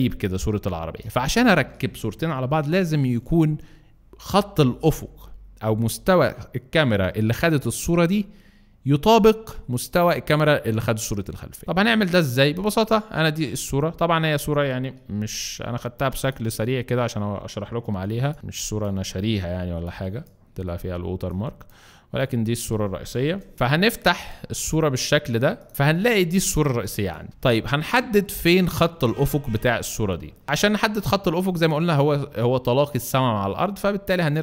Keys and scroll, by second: 15.1 x, 15.6 alt+x, 16.5 alt+x, 17.9 x, 18.3 c, 23.2 alt+Return, 26.6 alt+shift+space.